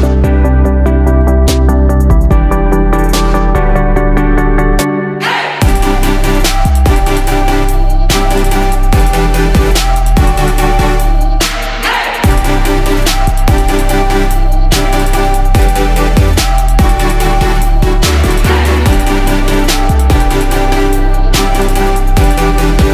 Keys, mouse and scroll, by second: 3.5 click.